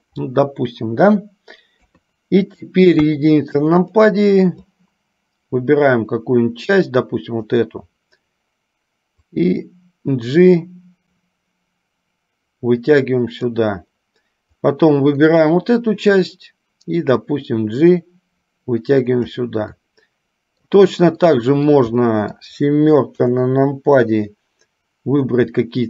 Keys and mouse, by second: 3.9 click, 4.8-7.7 drag, 9.6-13.6 drag, 14.9-16.3 drag, 17.4-19.6 drag, 19.9 middle click, 21.3 middle click, 22.3 middle click, 24.3-25.4 drag.